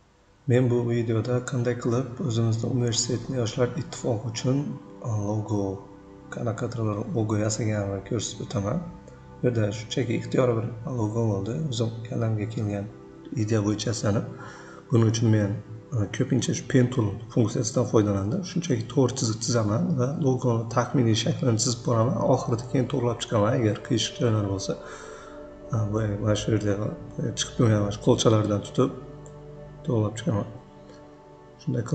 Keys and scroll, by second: 4.1 shift+c, 6.9 v, 12.0 ctrl+a, 12.5 3, 12.7 Return, 21.0 c, 24.3 v, 26.0-26.8 typing, 30.9 p, 31.2 shift+c.